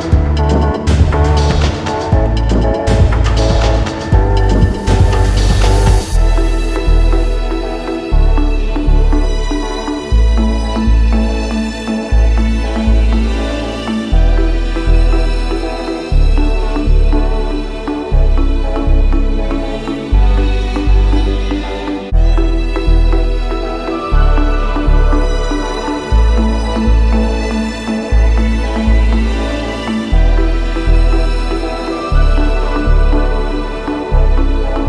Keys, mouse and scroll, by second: 0.8-2.0 typing, 2.6 click, 5.2 click, 5.3-5.8 scroll up 1, 5.8-6.5 scroll down 2, 7.4 click, 7.7-8.9 scroll up 1, 9.8 Return, 11.0 click, 11.7 click, 11.9-12.4 scroll up 2, 12.4-13.3 scroll down 3, 13.7-14.3 scroll down 1, 14.8 Return, 15.6 click, 15.8-16.4 scroll up 2, 16.4-17.3 scroll up 3, 17.4-18.1 scroll up 2, 18.1 scroll up 1, 19.5-20.1 scroll up 1, 20.2 Return, 21.2 click, 22.3 click, 22.5-23.1 scroll down 1, 23.9 click, 24.1 scroll up 1, 24.2-26.4 middle drag, 26.8 Return, 28.4-29.6 drag, 30.1 click, 33.2 click, 34.4 click.